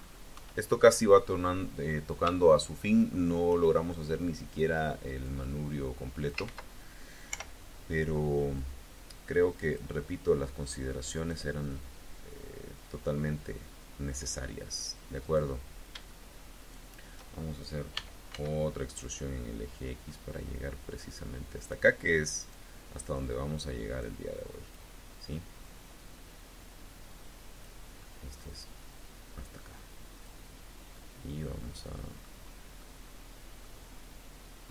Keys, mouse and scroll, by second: 0.2 KP_1, 1.0-1.5 scroll up 2, 2.3 shift+click, 4.2 click, 5.1-6.3 drag, 6.2 ctrl+z, 7.2 o, 8.4-9.8 drag, 15.0 click, 16.4 shift+click, 17.8 e, 18.2 x, 21.4 click, 22.2 click, 23.0-24.8 drag, 25.5-27.6 drag, 28.2-30.3 drag, 30.8 middle click, 31.1 click, 31.6 middle click, 32.6-33.6 middle drag, 34.6-34.7 drag.